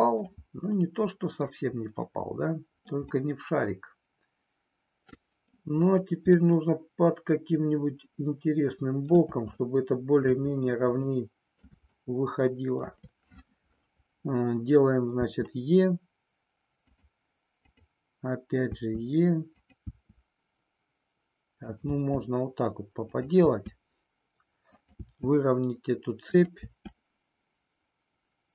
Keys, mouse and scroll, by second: 3.5-5.6 middle drag, 6.3-9.2 middle drag, 9.7 shift+middle click, 11.1 middle click, 11.9-12.9 shift+middle drag, 15.2 e, 18.7 e, 19.8 e, 21.9 e, 23.1 click, 23.5 e, 25.1 e, 26.6 e.